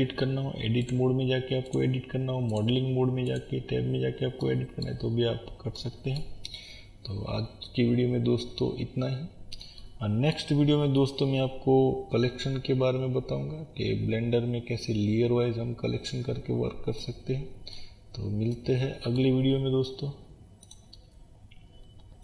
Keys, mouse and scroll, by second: 1.0 click, 2.6 click, 4.5-22.2 middle drag, 5.1 scroll up 1.